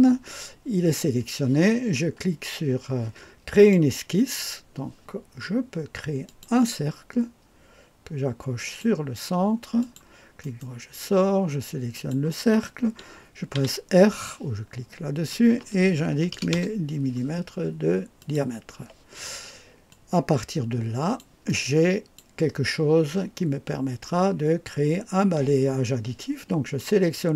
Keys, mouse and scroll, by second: 3.5 click, 6.2 click, 8.5 click, 9.8 click, 11.9 click, 16.1 KP_1, 16.3 KP_0, 16.5 Return, 18.2 click, 19.9-21.2 drag, 21.4 click.